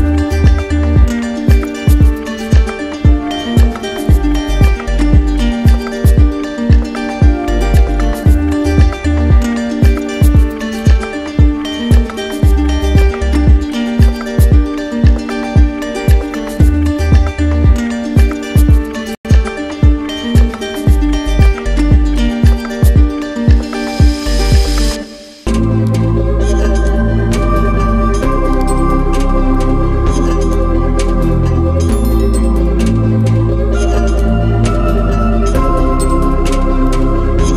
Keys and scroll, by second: 17.3 ctrl+alt+z.